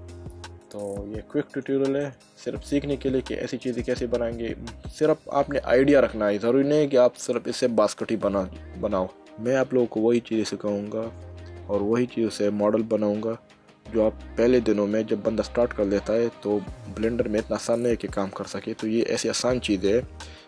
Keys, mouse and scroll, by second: 0.6 click, 2.0 click, 2.7 middle click, 6.7 middle click, 15.5 middle click.